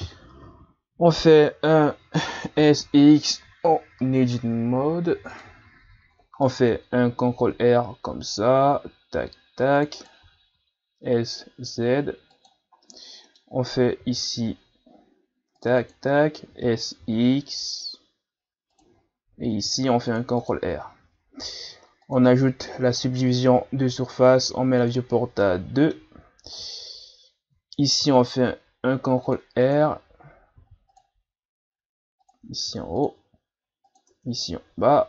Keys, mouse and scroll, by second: 1.3 Tab, 2.6 s, 6.5 middle click, 7.4 ctrl+r, 10.2 s, 12.8-14.0 middle drag, 14.0 ctrl+r, 16.5 s, 19.6 ctrl+r, 20.7 Tab, 22.0-25.4 drag, 25.4-26.8 middle drag, 26.8 Tab, 28.0 ctrl+r, 30.6 ctrl+r, 32.7 ctrl+r, 34.1 Tab.